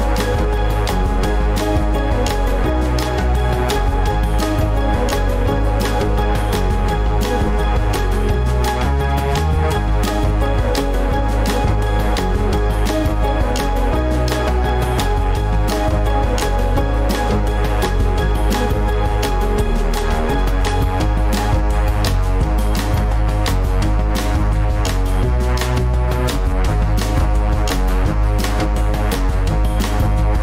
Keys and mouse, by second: 10.9 click, 15.0 click.